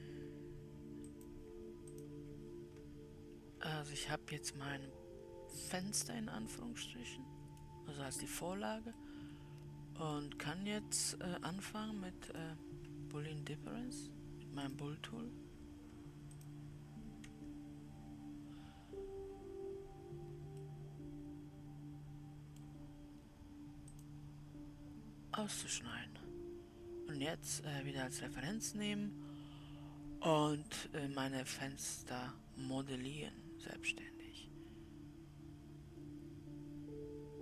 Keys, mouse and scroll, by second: 1.6-3.0 drag, 3.9-4.3 scroll down 4, 4.7-7.9 middle drag, 8.9-9.4 scroll up 2, 9.4-10.6 middle drag, 10.6-12.8 scroll up 1, 12.8-19.8 drag, 21.2-23.3 middle drag, 23.3-24.9 scroll up 1, 24.9-26.5 drag, 26.5-29.8 middle drag.